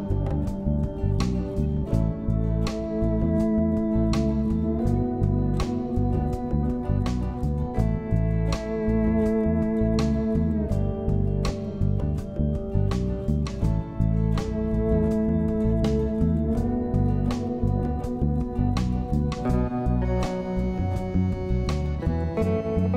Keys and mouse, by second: 3.1 shift+middle click, 3.6-5.7 shift+middle drag, 6.0 middle click, 6.6 shift+middle click, 7.9 shift+click, 8.0 shift+click, 11.0 click, 13.1 shift+click, 19.7 click, 20.1 shift+click.